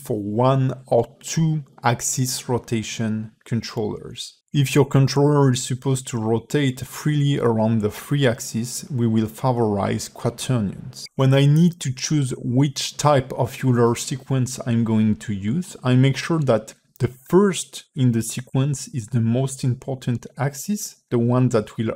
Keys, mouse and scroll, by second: 0.5 click, 2.8 click, 4.0 click, 6.0 click, 7.2 click, 9.2 a, 9.7 alt+r.